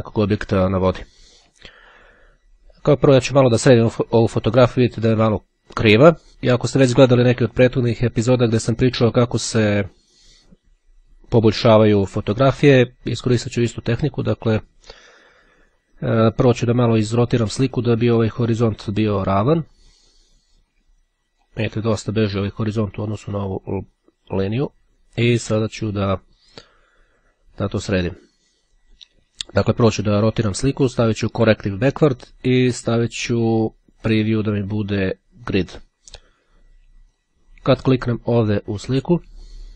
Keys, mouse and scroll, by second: 9.9 click, 18.4-22.1 drag, 23.3-25.3 drag, 28.7 click, 34.1 click, 35.5 click, 37.1 click, 39.3-39.7 ctrl+scroll up 5.